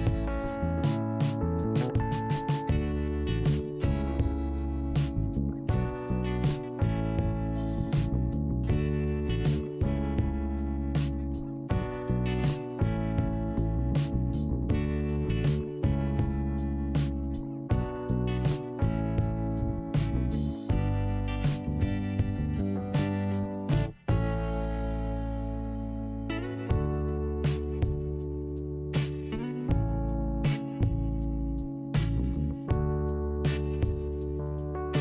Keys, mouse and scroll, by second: 2.5 click, 3.7 click, 5.9 scroll down 1, 7.5 scroll down 1, 9.2 scroll down 1, 9.5 p, 10.6 click, 15.5-16.5 scroll down 2, 16.8 ctrl+5, 18.1-18.6 scroll up 3, 18.2 5, 20.0 click, 20.7 click, 21.3-21.9 scroll up 1, 25.0 click, 25.1 click, 25.8 click, 26.9 click, 28.0 click, 28.1 click, 29.1 click, 31.8 click, 34.5 click.